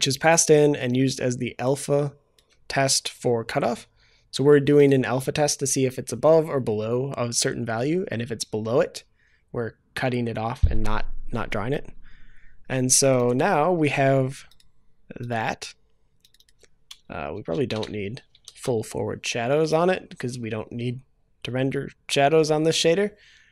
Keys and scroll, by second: 18.5 ctrl+s.